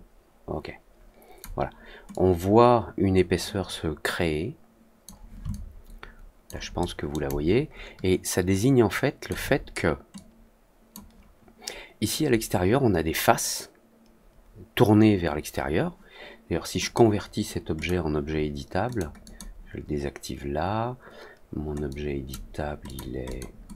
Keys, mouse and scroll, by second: 2.0-5.0 drag, 5.4-6.4 alt+drag, 6.7-7.1 alt+middle drag, 7.2-9.2 alt+drag, 10.1-10.8 drag, 16.7 click, 17.7 click, 18.8 click, 19.2 click, 21.8-22.2 drag, 22.8 click, 23.2 click, 23.6 drag.